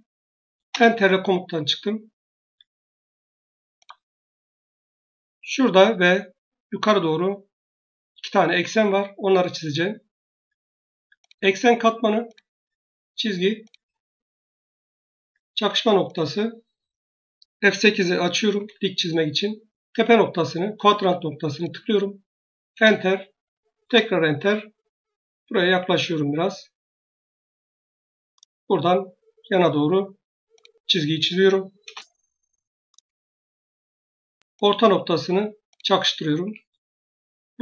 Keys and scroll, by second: 0.6 Return, 18.4 F8, 22.6 Return, 36.3 Escape.